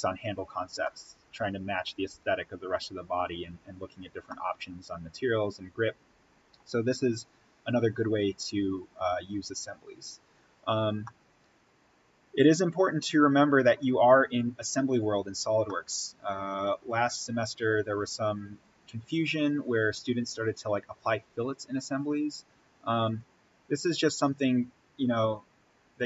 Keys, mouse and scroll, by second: 0.7-2.8 middle drag, 2.8-4.0 scroll up 1, 4.2-8.4 middle drag, 8.4-9.0 scroll up 1, 11.0-18.8 middle drag, 19.0-19.5 scroll down 1, 21.5-22.7 scroll down 1, 22.9 click.